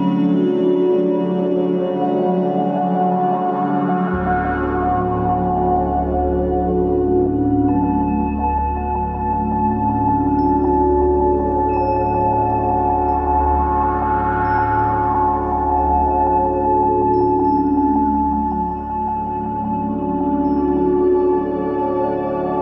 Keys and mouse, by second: 8.9-9.5 drag, 10.0 alt+z, 10.5-11.1 drag, 11.4 g, 13.4 x, 17.3 g, 21.9 click.